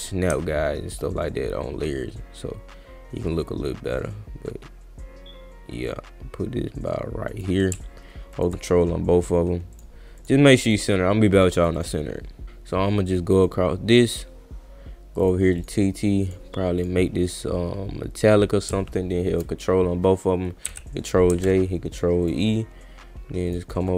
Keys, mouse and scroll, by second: 0.0-7.4 drag, 8.3 ctrl+click, 9.7 click, 10.2 click, 10.7 click, 11.4 click, 11.7 click, 13.2 click, 15.2 click, 15.6 click, 16.3 click, 16.8 click, 18.2 click, 19.3 ctrl+click, 21.3 ctrl+e, 21.9 click, 22.2 click, 23.5 click.